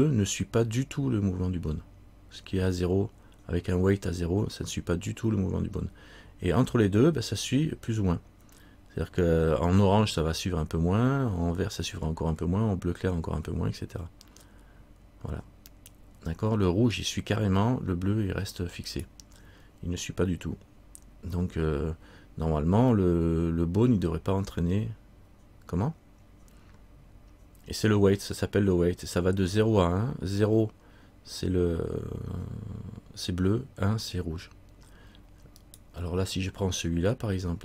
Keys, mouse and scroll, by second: 35.8 right click.